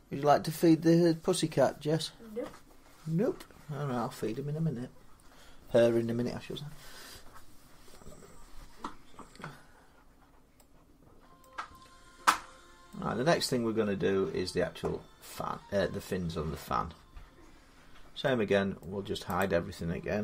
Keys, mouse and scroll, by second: 9.9-10.5 scroll down 2, 11.2 middle click, 12.7 middle click, 13.3 middle click, 18.6 middle click, 19.2 click.